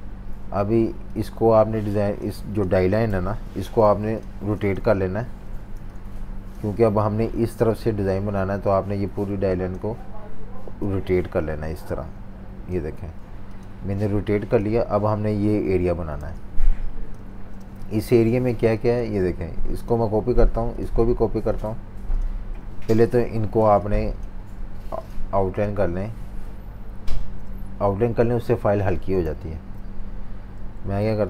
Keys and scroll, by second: 3.0 super+-, 4.0 v, 4.9 Delete, 5.7 z, 6.8 v, 7.9 v, 13.2 v, 16.2 z, 17.2 v, 17.5 space, 18.0-18.5 space, 20.2 super+3, 22.5 super+3, 23.6 alt+super+z, 24.5 v, 27.2 super+g, 29.3 super+-, 29.4 super+-, 29.6 super+-, 30.6 v, 31.1 super+3.